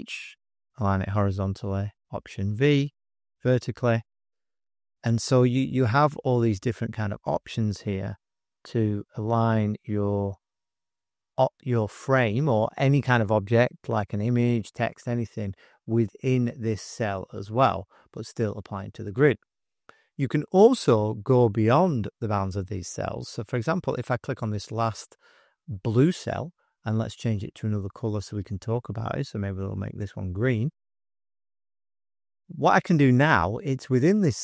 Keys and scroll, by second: 1.5 alt+v, 8.6 alt+d, 10.6 alt+w.